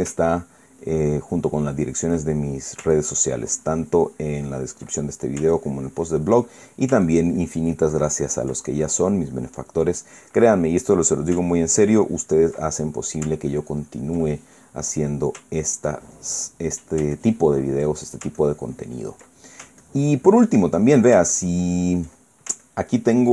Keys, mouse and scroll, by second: 0.0 shift+click, 0.2 shift+middle click, 1.5-2.9 ctrl+drag, 3.0 ctrl+middle click, 3.6-5.6 ctrl+drag, 5.7 ctrl+middle click, 6.2-7.6 ctrl+drag, 7.8-14.0 ctrl+drag, 14.2 ctrl+click, 15.0 ctrl+middle click, 15.5 ctrl+middle click, 16.3 ctrl+click, 17.2 ctrl+middle click, 17.9-19.0 ctrl+drag, 20.0 ctrl+click, 20.5-22.0 ctrl+drag, 22.0-23.3 ctrl+drag.